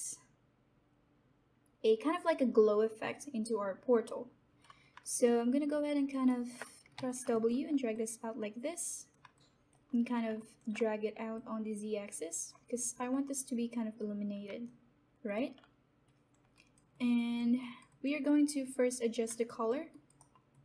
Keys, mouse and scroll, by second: 5.2 alt+click, 6.0 alt+right click, 6.5 alt+middle click, 6.9 w, 7.3-9.3 alt+drag, 9.3 alt+click, 11.6 click, 14.9 alt+click, 16.5 right click, 16.9 alt+click, 17.6 alt+right click, 17.8 alt+click, 19.9 alt+right click, 20.1 alt+middle click, 20.5 alt+click.